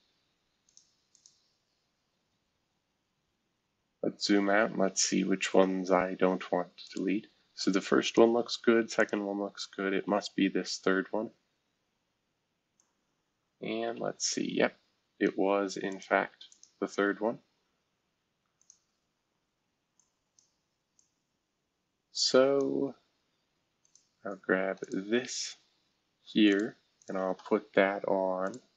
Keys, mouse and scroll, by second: 0.6 click, 1.1 click, 2.6-4.2 scroll down 10, 5.1 scroll down 2, 6.8 click, 8.0 click, 9.0 click, 9.9 Delete, 12.8-15.3 drag, 15.9 click, 16.5 ctrl+click, 18.6 click, 19.9 click, 20.9-22.6 drag, 23.8 click, 24.8 click, 26.5 click, 27.0 shift+click, 28.4 click.